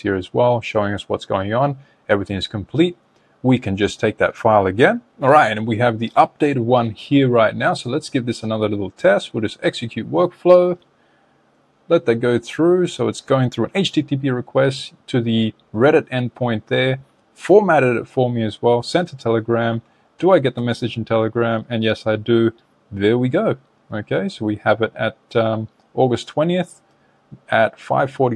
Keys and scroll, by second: 19.6 super+Tab.